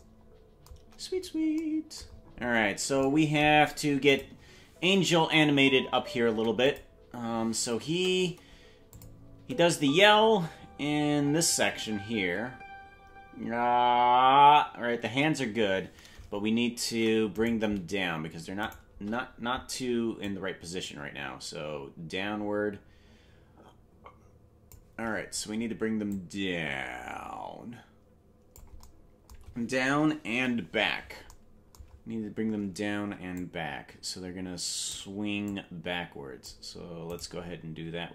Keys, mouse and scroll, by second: 0.8 KP_0, 2.1-2.8 scroll down 8, 3.0 scroll down 1, 4.1 click, 5.0 space, 6.7 click, 6.7 space, 7.9 KP_0, 8.9 click, 9.4 space, 15.1 space, 16.9 ctrl+Tab, 17.4-18.7 right drag, 20.2-24.7 drag, 26.1-28.6 drag, 30.3 KP_Decimal, 30.7-31.3 scroll down 8, 33.3-34.9 shift+drag, 35.5-36.5 drag, 37.2 right click.